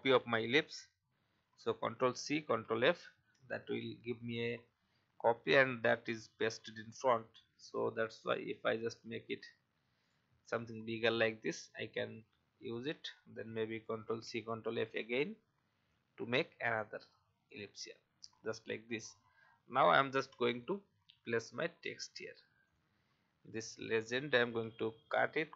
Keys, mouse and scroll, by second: 1.7 ctrl+c, 2.4 ctrl+f, 7.7-10.1 alt+shift+drag, 13.8 ctrl+c, 14.2 ctrl+f, 15.9-18.2 alt+shift+drag, 18.6-19.5 alt+scroll down 1, 20.6 alt+scroll down 1, 21.7-22.6 alt+scroll down 1, 22.6 click, 24.5 ctrl+x, 25.4-25.5 alt+scroll up 2.